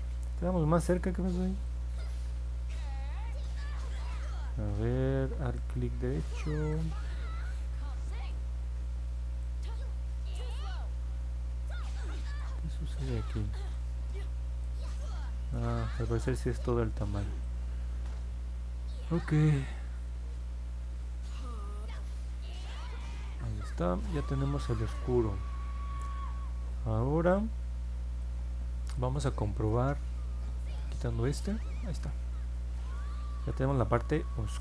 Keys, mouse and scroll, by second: 0.9 alt+click, 1.8 middle click, 2.2 middle click, 2.5 middle click, 2.9 middle click, 3.2 middle click, 3.5 middle click, 5.5-6.7 alt+right drag, 7.5 alt+right click, 9.5-12.5 alt+right drag, 13.1 alt+right click, 14.1 alt+right click, 15.1 alt+right click, 15.9 middle click, 16.4 alt+click, 21.9 click, 26.0 middle click, 26.6 middle click, 27.3 alt+click, 30.7 click, 31.9 middle click, 32.5-34.6 alt+drag.